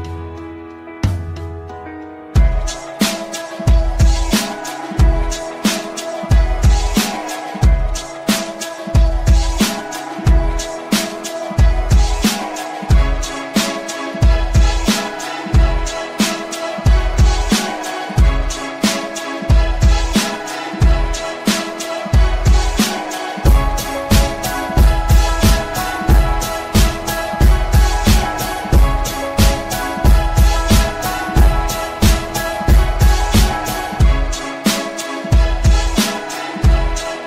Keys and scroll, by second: 5.4 d, 6.8 f, 25.9 F3, 27.9 shift+F2, 29.0 F9.